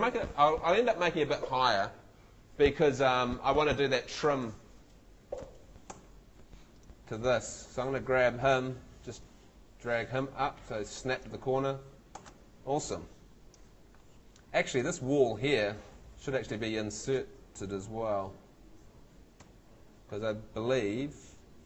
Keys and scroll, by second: 5.9 Escape, 19.4 F2.